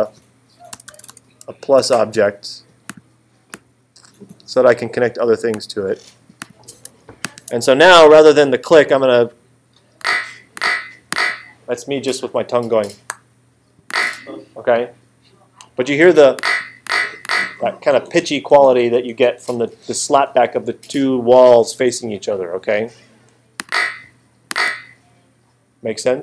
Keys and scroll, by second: 0.0-1.8 typing.